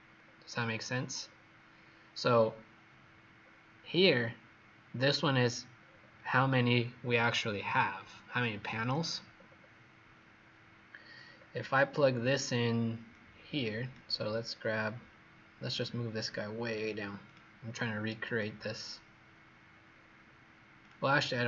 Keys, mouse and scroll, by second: 0.0-1.1 scroll down 2, 1.1-3.3 scroll up 4, 3.3-5.7 scroll down 2, 5.7 scroll up 1, 9.3-9.6 scroll down 4, 10.8-11.6 scroll down 5, 11.6-13.0 scroll up 1, 13.0 click, 14.3 scroll down 3, 15.5 click, 17.6 click, 19.8-20.7 scroll up 4, 20.7 click.